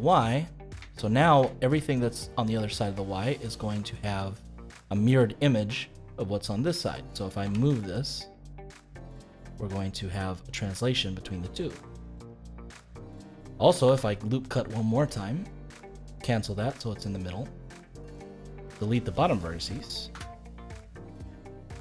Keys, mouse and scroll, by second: 1.2 scroll down 2, 1.5-5.8 shift+middle drag, 5.8 click, 7.4 g, 12.4-13.8 middle drag, 13.8 ctrl+r, 16.7-18.6 middle drag, 18.6 click, 20.1 x, 21.5-21.8 middle drag.